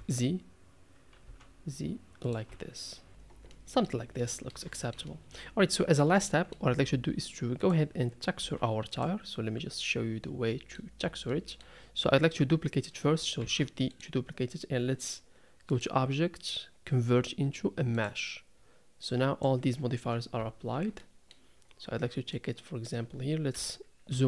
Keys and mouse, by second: 2.5 Tab, 3.1 r, 3.5-3.9 middle drag, 4.2-4.5 middle drag, 4.7 shift+middle drag, 5.0 middle drag, 5.7 middle drag, 6.3 shift+middle drag, 8.4 z, 10.2-10.8 middle drag, 11.3-11.6 middle drag, 13.4 shift+d, 15.8-16.9 right drag, 16.9-18.1 drag, 19.1 click, 20.4 Tab, 20.7 Tab, 21.0-21.3 middle drag, 22.4 click, 23.5 KP_Decimal, 24.1 KP_3.